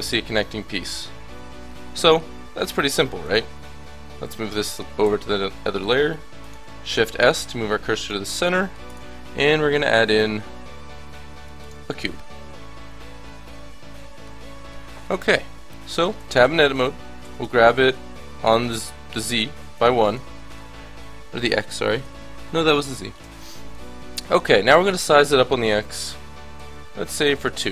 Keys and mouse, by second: 3.2-5.1 drag, 4.7 m, 6.9 shift+s, 8.9 shift+a, 14.0 middle click, 15.7 KP_1, 16.1 Tab, 17.2 g, 24.7 s.